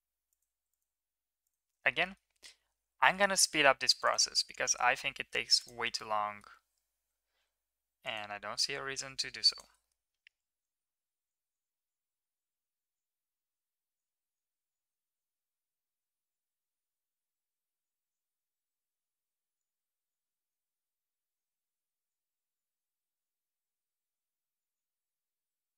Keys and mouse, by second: 0.5 ctrl+r, 1.8 middle click, 2.1 middle click, 3.0 middle click, 3.3 middle click, 3.9 ctrl+r, 6.1 middle click, 7.7 ctrl+r, 9.8 middle click, 10.3 ctrl+r, 11.0 ctrl+r, 11.3 ctrl+r, 11.6 ctrl+r, 12.0 middle click, 12.4 ctrl+r, 12.7 ctrl+r, 13.2 ctrl+r, 13.6 ctrl+r, 14.0 ctrl+r, 14.3 ctrl+r, 14.7 ctrl+r, 15.0 middle click, 15.2 ctrl+r, 15.4 Tab, 15.5 middle click, 15.8 Tab, 15.8 middle click, 16.0 ctrl+r, 16.4 Tab, 16.7 middle click, 16.9 middle click, 17.1 Tab, 17.2 shift+middle click, 17.4 middle click, 17.7 shift+middle click, 17.8 ctrl+r, 18.4 ctrl+r, 18.8 ctrl+r, 19.2 ctrl+r, 19.7 ctrl+r, 20.2 ctrl+r, 20.6 middle click, 21.4 ctrl+r, 21.7 ctrl+r, 22.2 ctrl+r, 22.6 shift+middle click, 22.8 ctrl+r, 23.2 ctrl+r, 23.7 Tab, 23.9 middle click, 24.0 shift+middle click, 24.2 Tab, 24.3 middle click, 24.6 ctrl+r, 24.8 middle click, 25.0 Tab, 25.1 shift+middle click, 25.3 shift+middle click, 25.5 shift+middle click, 25.7 shift+middle click, 25.7 Tab.